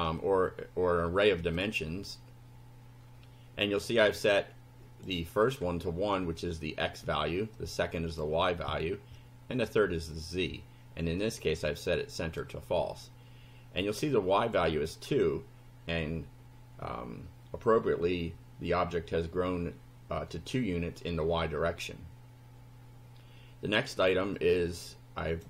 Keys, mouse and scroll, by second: 1.4 click, 3.9-5.2 drag, 7.6 click, 9.2 click, 11.6 click, 13.9 click, 24.4-25.4 drag.